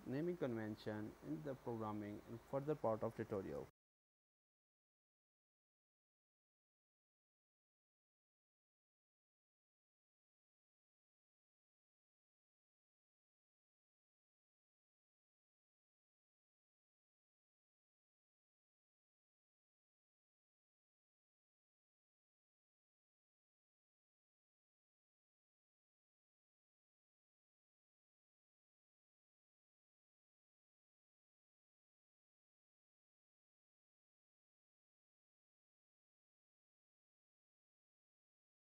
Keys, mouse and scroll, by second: 0.6 click, 1.3 click, 1.5 click, 3.9 BackSpace, 5.9 Tab, 6.3 BackSpace, 6.3 3, 7.1 click, 7.4 click, 7.6 click, 8.1 click, 8.1 BackSpace, 8.5 Tab, 8.7 BackSpace, 9.0 Tab, 9.0 4, 9.5 click, 9.9 click, 10.1 click, 10.9 click, 11.1 Tab, 11.4 BackSpace, 11.7 Tab, 11.7 5, 12.0 click, 12.3 click, 12.6 click, 13.2 click, 13.2 BackSpace, 13.7 Tab, 13.9 BackSpace, 14.1 6, 14.5 click, 14.8 click, 15.0 click, 15.7 click, 15.7 BackSpace, 15.8 BackSpace, 16.5 Tab, 16.7 BackSpace, 16.8 7, 17.0 Tab, 17.4 click, 17.7 click, 18.0 click, 18.7 click, 18.7 BackSpace, 19.5 Tab, 19.7 BackSpace, 19.8 8, 20.5 click, 20.9 click, 21.2 click, 21.9 click, 22.2 Tab, 22.3 BackSpace, 22.4 9, 22.6 Tab, 23.0 click, 24.0 click, 24.3-24.6 click, 24.6 click, 24.9 click, 24.9 click, 25.8 Tab, 26.0 KP_0, 26.3 Tab, 27.8 click, 28.1 shift+click, 28.9 right click, 28.9 click, 29.1 right click, 30.5 right click, 31.1 shift+s, 31.8 shift+s, 32.7 shift+s, 32.7 scroll down 7, 32.8 scroll up 1, 32.9 scroll down 2, 33.1 g, 34.2-35.0 scroll up 10, 34.6 right click, 36.1 click, 36.9 shift+d, 37.3 click, 37.3 click, 37.8 BackSpace, 38.6 click.